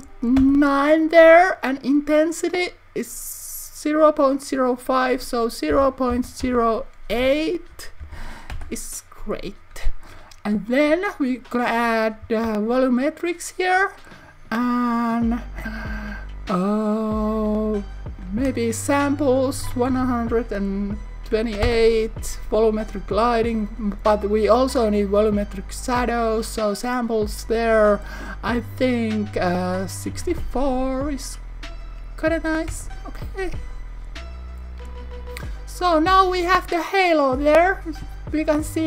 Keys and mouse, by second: 4.9-9.4 drag, 11.5 click, 17.6 click, 25.0-33.6 drag.